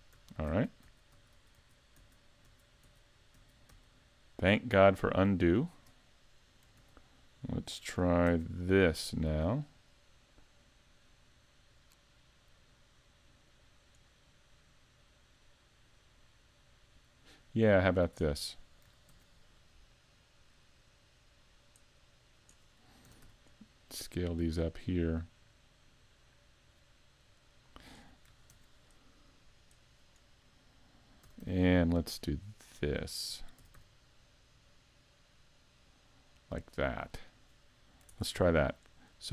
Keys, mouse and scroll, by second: 0.1 super+z, 0.5 super+z, 0.9 super+z, 1.1 super+z, 1.4 super+z, 1.6 super+z, 2.0 super+z, 2.5 super+z, 2.8 super+z, 3.3 z, 3.8 z, 6.8 z, 8.3 ctrl+r, 18.1 click, 19.1 ctrl+r, 22.4 click, 23.1 s, 27.6 click, 28.5 ctrl+r, 30.5 click, 31.2 s, 32.8 right click, 33.6 s, 37.2 click, 38.1 ctrl+Tab, 38.9 right click.